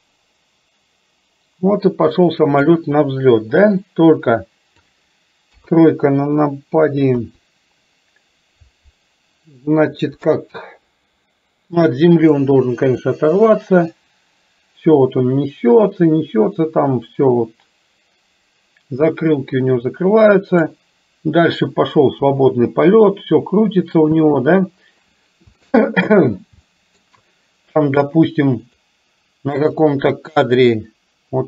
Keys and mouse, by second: 3.7-5.0 drag, 5.6 KP_3, 7.2 KP_3, 12.5-20.7 drag, 22.2 space, 24.2 space, 25.6 shift+middle click, 26.7 middle click, 28.7 click, 29.9 click.